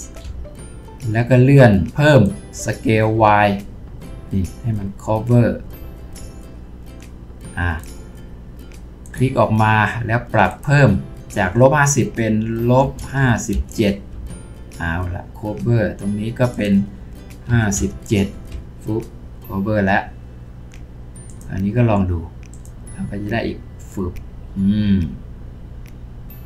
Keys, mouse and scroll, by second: 0.2 s, 12.8-13.5 typing, 14.1 Return, 17.5 typing, 18.3 Return.